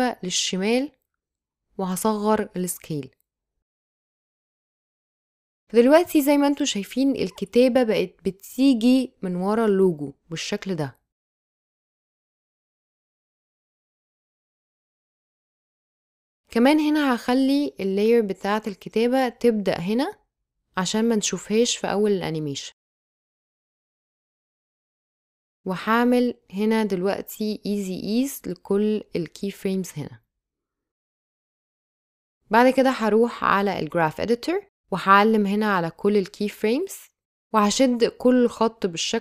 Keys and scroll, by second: 12.4 space, 18.1 space, 23.1 space, 26.8 space.